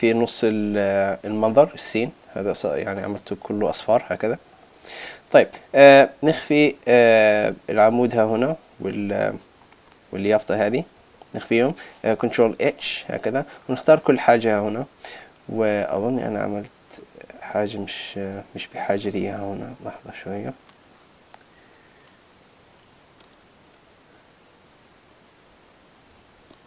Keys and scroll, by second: 11.0 super+z, 26.2 super+z.